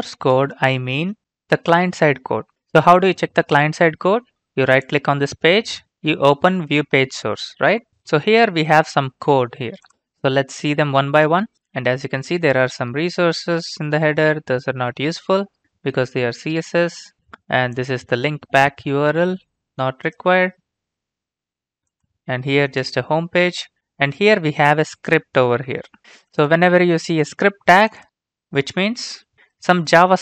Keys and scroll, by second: 1.1 alt+Tab.